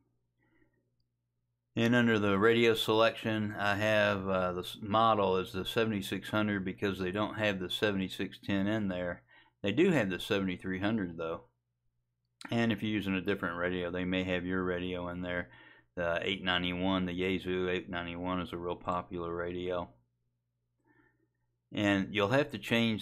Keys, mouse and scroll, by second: 0.1 click, 8.3 click, 18.9 click.